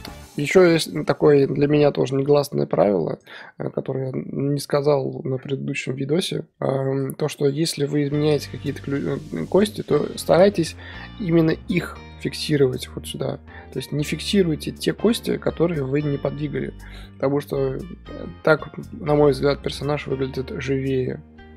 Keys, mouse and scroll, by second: 0.6-1.0 scroll down 3, 1.0-3.2 middle drag, 3.2-3.7 drag, 3.7-9.7 middle drag, 9.7 shift+click, 10.0-12.2 shift+middle drag, 13.7 i, 15.1-21.5 middle drag.